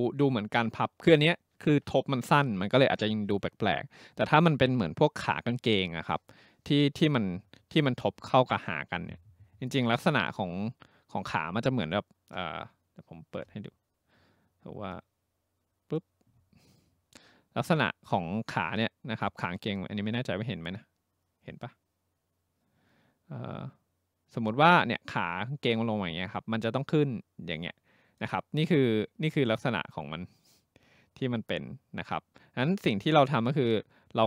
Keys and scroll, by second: 13.4 Print, 13.6 Print.